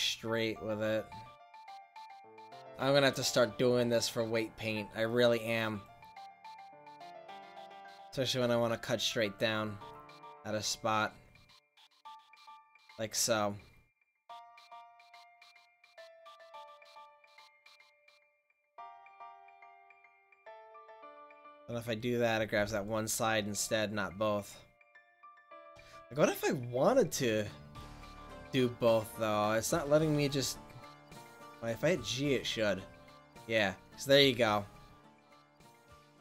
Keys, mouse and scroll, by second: 8.2 ctrl+z, 12.8 middle drag, 13.2 middle click, 17.1 ctrl+z, 19.0 click, 21.4-23.2 right drag, 23.9-26.1 middle drag, 26.1 click, 28.0 middle click, 28.3 middle click, 28.6 middle click, 29.0-30.5 middle drag, 31.4 g.